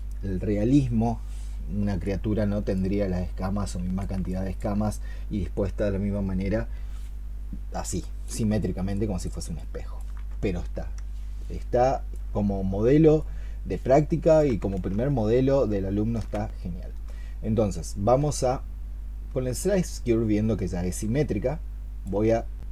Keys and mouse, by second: 4.1 alt+click, 7.9 alt+click, 8.8 alt+click, 9.4 alt+click, 16.0 ctrl+shift+click, 16.9 space, 19.1 space, 20.5 space.